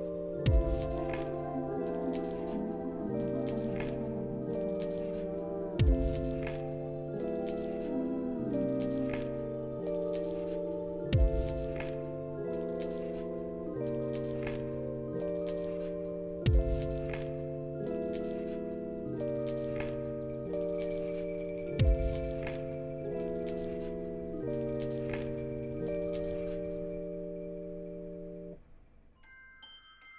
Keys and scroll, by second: 1.1 space.